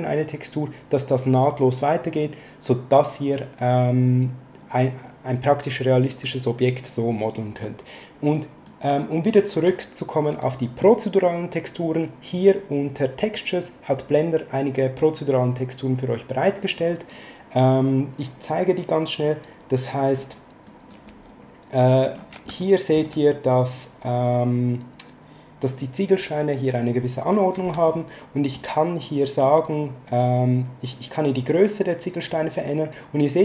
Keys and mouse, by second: 6.1 click, 8.6 click, 10.3 click, 17.1 click, 19.2 click, 20.6 click, 22.6 shift+middle click, 27.9 shift+middle click, 30.1 click.